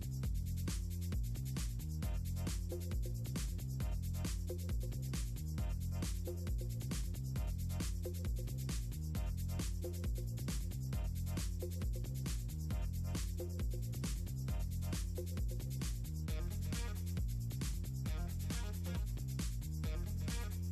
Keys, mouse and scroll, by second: 0.3 click, 2.3 shift+click, 2.4 click, 3.4 click, 4.4 click, 4.5 click, 4.8 click, 4.9 click, 5.3 click, 5.5 click, 5.9 click, 6.9 click, 7.7 click, 8.2 click, 8.8 middle click, 9.4 click, 9.9 click, 10.1 shift+click, 10.3 click, 10.5 click, 12.0 ctrl+click, 12.1 click, 13.3 click, 14.1 click, 14.4 click, 15.1 ctrl+scroll down 2, 16.1 click, 16.5 click, 17.3 click, 18.7 click, 19.0-20.5 drag.